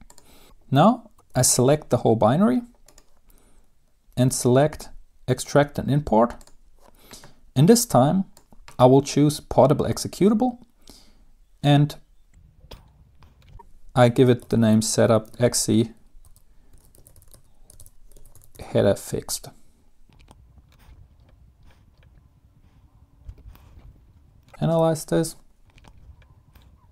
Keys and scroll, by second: 3.3 ctrl+a, 15.5-20.8 typing, 23.9 Return, 25.9 Return.